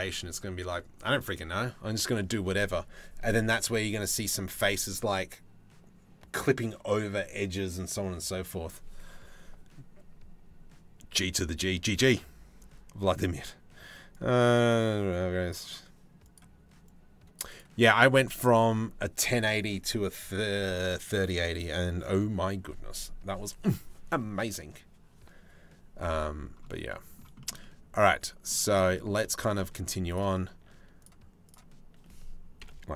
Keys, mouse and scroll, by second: 26.5 middle click, 27.0 shift+middle click, 27.2 middle click, 28.6 middle click, 30.6 shift+middle click, 31.1 shift+middle click, 32.2 KP_7.